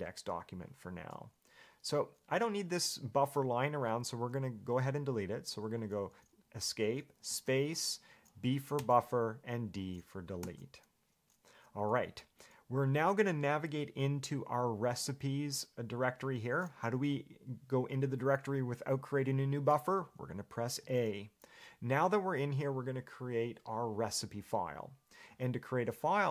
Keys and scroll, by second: 5.7 Escape, 21.0 a.